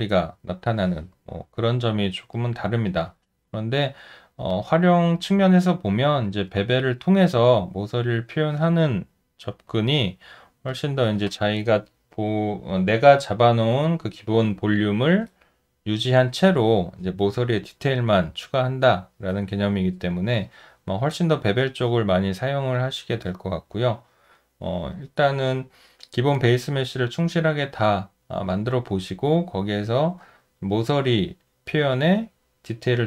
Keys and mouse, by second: 1.5 alt+middle click, 2.4 alt+right click, 3.3 alt+middle click, 4.5 alt+click, 5.6 alt+middle click, 6.4 alt+right click, 7.1 alt+middle click.